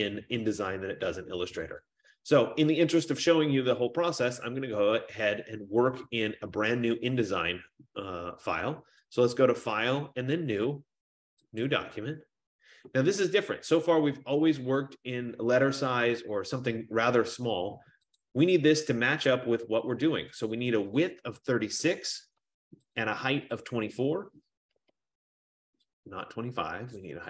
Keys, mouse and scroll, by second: 2.0 click, 9.8 click, 11.7 click, 15.4 F15, 16.4 click, 18.5 click, 21.2 click, 21.5-22.4 typing, 23.1 click, 24.5 click, 24.7-25.4 typing.